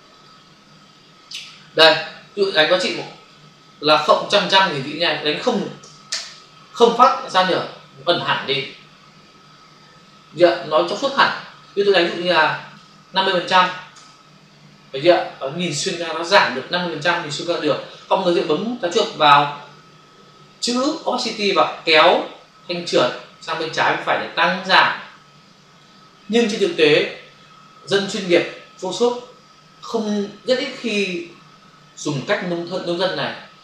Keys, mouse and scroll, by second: 0.2 click, 2.9 click, 6.0 Return, 12.5 click, 13.5 typing, 14.0 Return, 21.5 click.